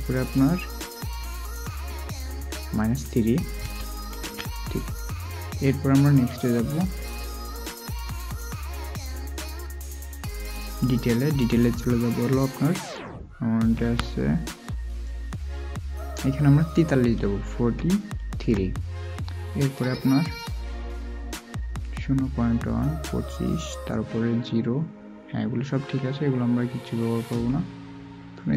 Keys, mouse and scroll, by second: 7.3 typing, 17.5 typing.